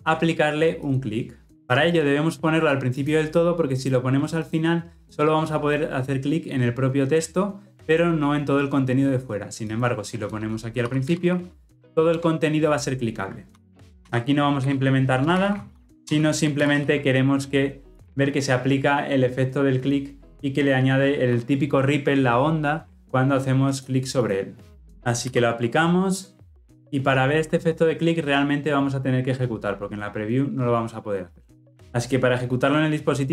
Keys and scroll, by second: 12.1 Return, 16.5 ctrl+alt+l, 16.7 ctrl+alt+o.